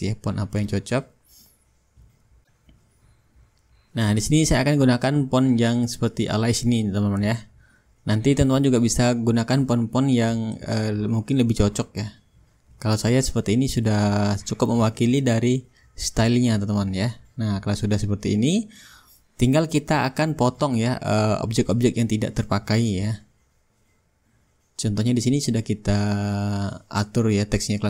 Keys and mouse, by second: 1.8 s, 2.4 Down, 4.3 Up, 7.7-8.8 drag, 8.4 ctrl+a, 9.4-11.9 drag, 12.1-14.5 ctrl+shift+drag, 14.8-15.9 shift+drag, 16.0-20.7 drag, 17.2-19.1 shift+right drag, 17.9-19.1 middle drag, 22.6-23.6 middle drag, 23.6-26.5 drag, 27.5-27.8 drag.